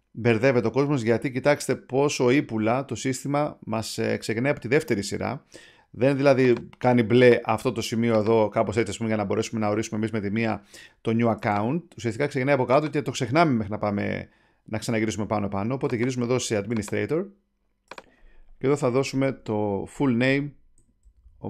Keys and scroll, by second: 19.2-21.4 typing.